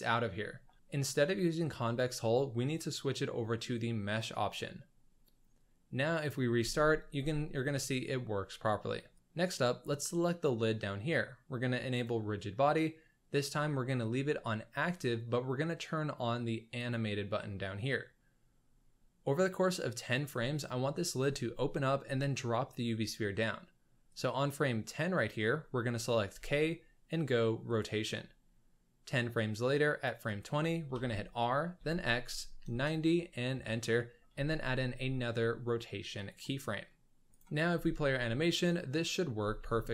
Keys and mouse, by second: 1.8-4.3 drag, 6.2 click, 6.6 space, 7.2 space, 9.1 click, 9.5 click, 12.2-16.8 drag, 24.1 click, 26.3 k, 29.1 click, 30.9 r, 34.3 k, 35.9 right click, 36.8-37.4 middle drag, 37.3 z, 37.7 space, 39.4 space, 39.8-39.9 middle drag.